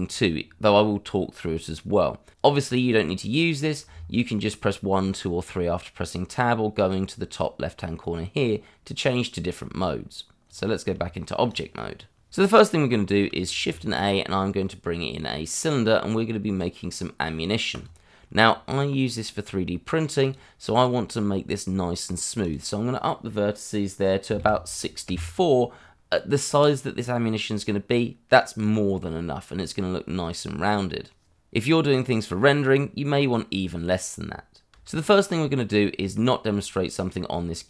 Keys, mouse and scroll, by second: 10.4 click, 11.0 shift+middle click, 11.2 shift+middle click, 13.6 shift+a, 17.7 click, 20.2 click, 22.4 click, 24.4 4, 25.1 Return, 27.5 middle click, 34.9 shift+middle click.